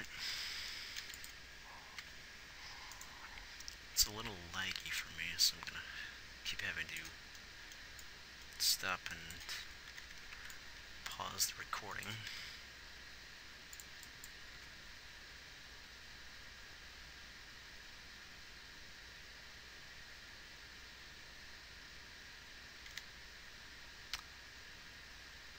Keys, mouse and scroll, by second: 2.3 shift+Left, 10.3 a, 10.6 b, 12.7 s, 14.9 alt+a, 23.4 alt+a.